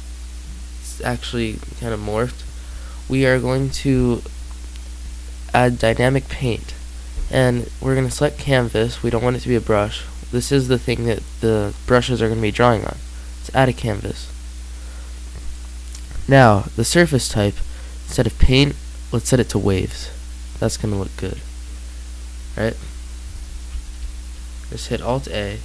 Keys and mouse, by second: 0.8-4.8 drag, 7.4-20.2 drag, 23.8 alt+a.